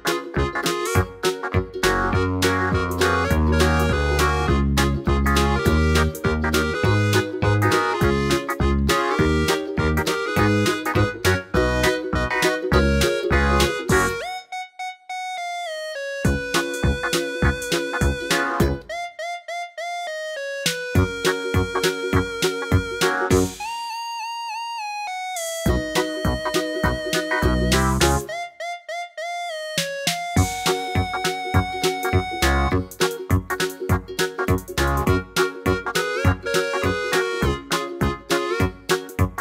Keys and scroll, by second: 12.0 Down, 13.6 Down, 13.9 Left, 22.7 super+z, 23.2 super+z, 29.3 super+d.